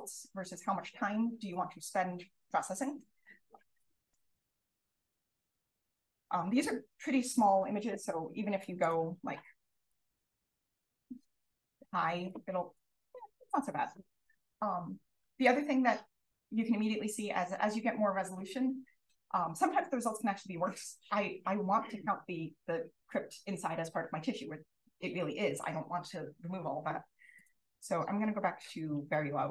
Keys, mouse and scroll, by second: 4.3-4.8 drag, 5.4 click, 6.1 click, 8.5 drag, 9.7-12.6 drag, 14.8-15.4 scroll up 1, 15.4 click, 27.7 click.